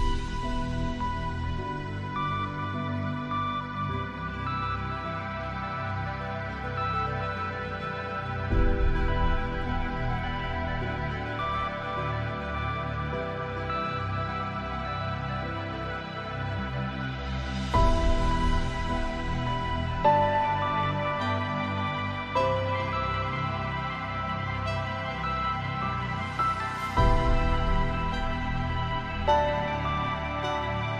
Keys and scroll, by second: 1.4 ctrl+space, 18.1 ctrl+Return, 21.6 ctrl+space.